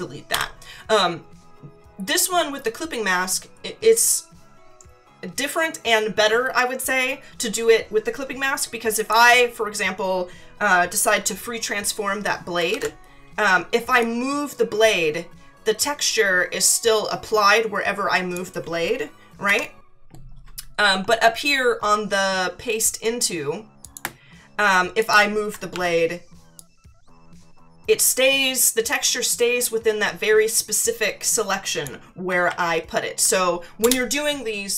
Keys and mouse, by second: 0.3 Delete, 9.0 click, 12.7 ctrl+t, 14.0 click, 19.4 Escape, 23.8 click, 25.0 click, 25.7 ctrl+t, 26.6 click, 32.4 ctrl+z, 33.8 Return.